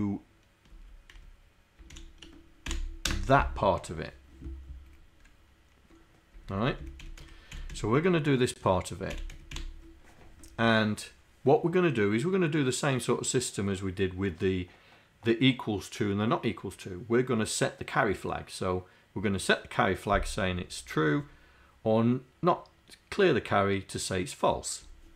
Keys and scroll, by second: 0.9 Down, 1.9 shift+End, 2.7 Delete, 3.1 BackSpace, 6.7 Left, 7.3 Right, 7.7 Left, 9.1 Delete, 9.4 Right, 9.6 End.